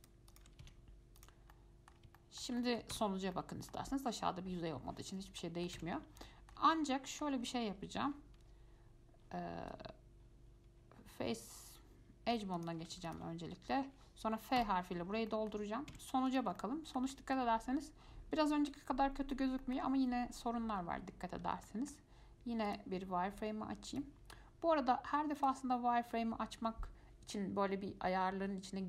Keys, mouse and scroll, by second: 0.2 shift+click, 0.5 shift+click, 0.8 x, 1.7-2.4 scroll down 3, 1.7 middle click, 2.4 shift+middle click, 3.1 Tab, 3.5-5.5 middle drag, 5.5 scroll up 1, 5.6 middle click, 6.0 Tab, 6.1-6.4 scroll up 4, 6.4 shift+middle click, 6.7 scroll down 1, 6.9-10.0 middle drag, 12.5 2, 12.8 click, 13.3 alt+click, 14.8 f, 15.1 scroll down 2, 15.5 shift+middle click, 16.1 Tab, 16.5 click, 16.8-22.9 middle drag, 22.9-28.6 drag.